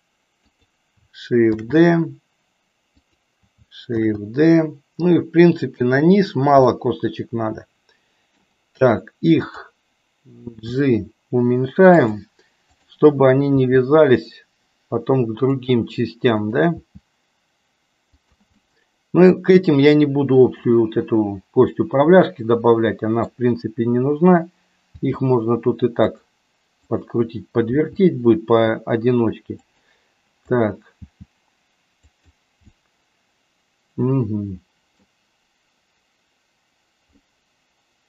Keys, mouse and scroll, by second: 1.6 shift+d, 4.1 shift+d, 6.6-8.5 middle drag, 10.5 g, 12.8 click, 13.5 g, 16.4 click, 17.0 g, 18.6-20.6 middle drag, 21.7 middle click, 22.7 middle click, 24.7 g, 26.7 click, 27.6 g, 30.4 click, 31.1 g, 32.8-35.1 middle drag, 37.2-38.0 middle drag.